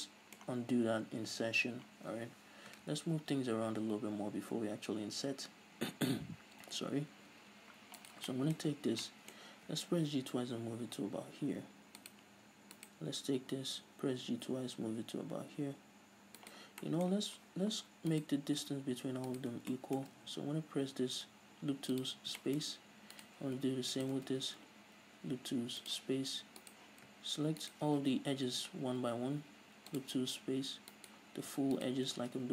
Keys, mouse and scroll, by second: 2.6 ctrl+z, 5.6 ctrl+z, 7.7-8.2 scroll up 2, 8.2 right drag, 8.5 middle click, 8.8 scroll up 2, 8.9-9.2 scroll down 2, 9.2 middle click, 9.9 g, 12.3 click, 13.0 right click, 13.7 g, 16.7 right click, 16.9 scroll down 1, 17.0-18.3 middle drag, 17.5 scroll up 1, 18.3 right click, 19.5 ctrl+right click, 19.9-23.4 middle drag, 20.4 w, 23.4-23.8 right drag, 24.2 ctrl+right click, 24.5 w, 26.8 right click, 27.8 ctrl+right click, 28.7 w, 31.1 right click, 32.0 ctrl+right click.